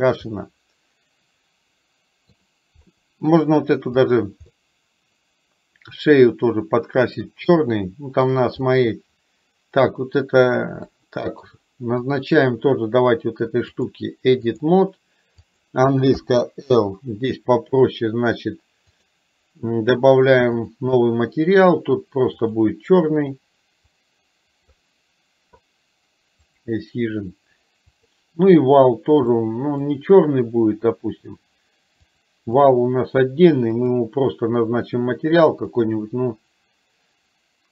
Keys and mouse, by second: 0.5-2.5 middle drag, 4.1 click, 4.6-7.2 middle drag, 7.6-8.4 shift+middle drag, 8.7 click, 11.0-11.4 middle drag, 13.7-14.7 drag, 20.6 click, 22.5 click, 26.6 click, 28.1 click, 29.4 middle click, 32.1 click, 33.7 click, 35.9 click.